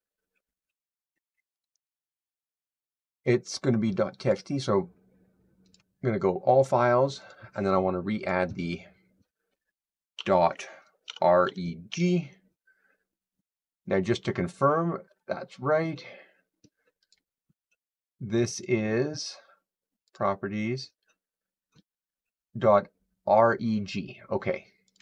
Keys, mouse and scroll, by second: 1.5 click, 4.1 click, 5.6 click, 7.1 click, 8.1 click, 10.7-12.2 typing, 14.8-15.6 typing, 15.1 click, 17.0 click, 18.5 click, 20.0 click, 24.8 click.